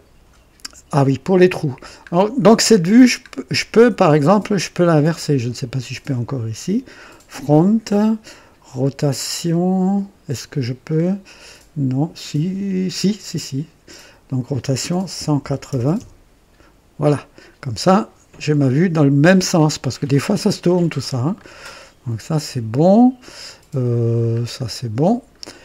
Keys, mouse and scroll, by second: 1.2-1.9 middle drag, 1.9 scroll up 1, 3.2-4.1 scroll down 2, 5.1 click, 13.0 click, 15.1 KP_1, 15.3 KP_8, 15.6 KP_0, 15.9 Return, 15.9 KP_Enter, 18.5 click, 20.4 scroll down 1, 21.3-23.8 middle drag, 21.4 typing, 24.1-24.5 scroll up 1, 25.2-25.6 middle drag.